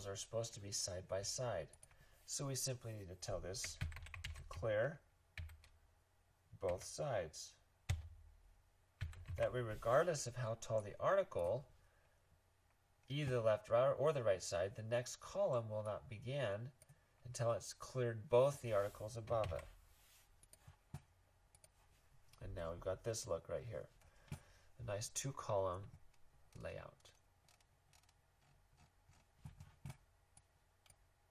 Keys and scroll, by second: 3.4-5.3 typing, 6.6 typing, 7.9 Return, 8.7-9.4 typing, 19.4 super+s.